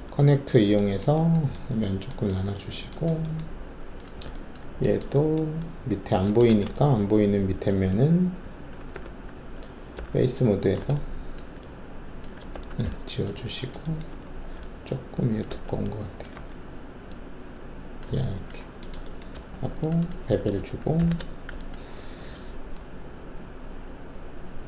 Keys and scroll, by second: 6.5 alt+shift+a, 8.9 4, 9.9 alt+3, 12.5 ctrl+alt+`, 13.3 alt+`, 14.1 alt+2, 15.5 alt+1, 16.3 w, 18.5 alt+`, 19.3 alt+2, 20.9 shift+b.